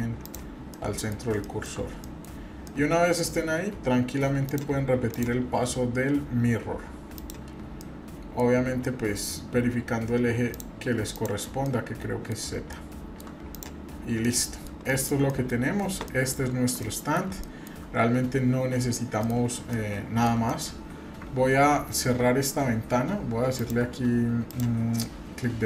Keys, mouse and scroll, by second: 0.7 middle click, 1.2-1.7 scroll down 2, 1.4 shift+middle drag, 2.0 middle click, 2.3-2.7 scroll down 1, 2.7 middle click, 4.4 click, 7.2 click, 7.8-8.4 middle drag, 8.4 scroll down 1, 8.8 middle click, 10.5 click, 11.1 click, 11.6-12.3 middle drag, 12.4 scroll down 1, 12.6 scroll up 1, 12.7-13.2 shift+middle drag, 13.5 drag, 13.9 scroll down 1, 14.2-14.6 middle drag, 14.9 shift+middle click, 15.3 middle drag, 15.7 scroll up 1, 16.1 shift+middle drag, 16.5 scroll up 1, 16.8-17.2 middle drag, 17.4-17.8 shift+middle drag, 18.1 scroll up 1, 19.2 middle click, 19.7-20.3 shift+middle drag, 20.5 middle click, 23.6 click.